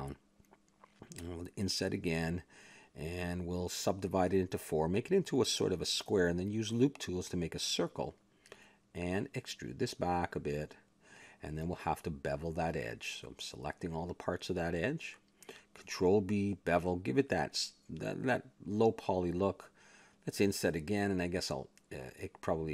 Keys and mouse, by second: 0.7 click, 1.6 i, 3.0 w, 5.5 s, 6.8 w, 9.4 middle click, 10.3 middle click, 10.3 e, 12.1 a, 12.4-13.4 middle drag, 13.4 ctrl+Tab, 13.7 middle click, 14.2 click, 15.5-16.7 middle drag, 16.7 ctrl+b, 16.9 click, 18.0 a, 18.2 ctrl+Tab, 18.8 click, 20.2 i, 21.7-22.7 middle drag.